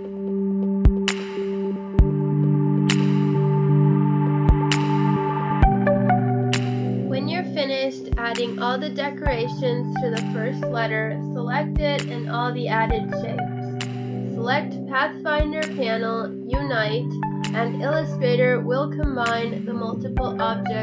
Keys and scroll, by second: 1.3 space, 2.5 space, 3.0 space, 3.2 space, 3.9 space, 5.2 space, 5.5 space, 5.8 space, 8.5 space, 8.8 space, 10.6 space, 12.8 space, 13.1 space, 16.9 space, 19.0 space, 19.4 space.